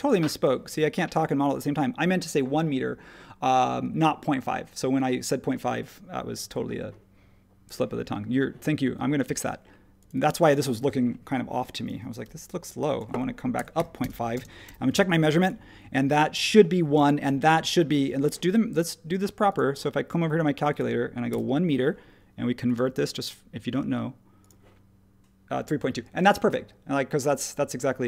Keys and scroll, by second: 12.2 p, 13.3-14.2 typing, 16.6 typing, 21.3 1.